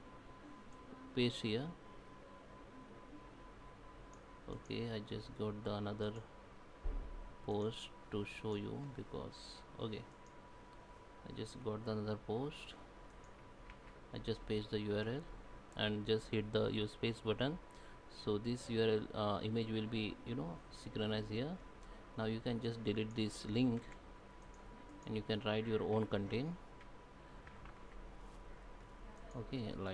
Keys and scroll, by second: 13.4 ctrl+F8, 13.8 ctrl+?.